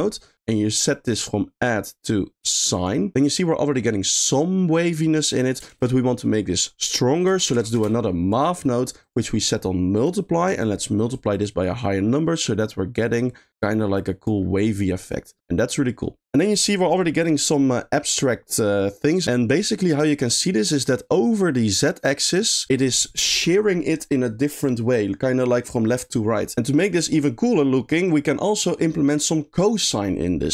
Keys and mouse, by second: 1.3-2.9 drag, 5.7 shift+a, 9.0-10.1 drag, 11.2-14.3 drag, 14.6-16.2 middle drag, 16.4 middle click, 20.4 middle click, 21.8 click, 22.5 click, 26.5 g.